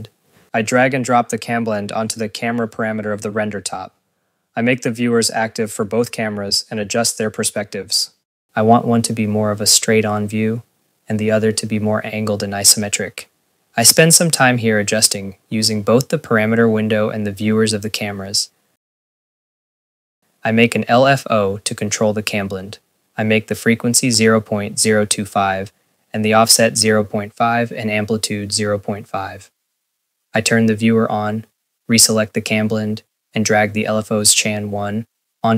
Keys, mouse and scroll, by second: 0.0 click, 1.0 click, 1.8 click, 2.1 click, 2.4 click, 2.6 click, 2.8 ctrl+s, 3.0 scroll, 9.7 8, 10.0 Return, 10.0 click, 10.9-16.6 typing, 10.9 click, 11.4 click, 11.8 click, 12.1 click, 12.8 click, 13.3 click, 13.4 ctrl+s, 13.6 click, 14.0 click, 14.5 click, 15.7 click, 16.3-16.9 scroll, 16.5 click, 16.8 ctrl+s, 17.0 click, 17.1 ctrl+s, 17.6 click, 18.1 right click, 18.1-18.6 scroll, 18.2 right click, 18.7 ctrl+s, 19.2 Tab, 19.9 click, 20.2-21.2 typing, 21.2 click, 22.3 scroll, 32.9 click.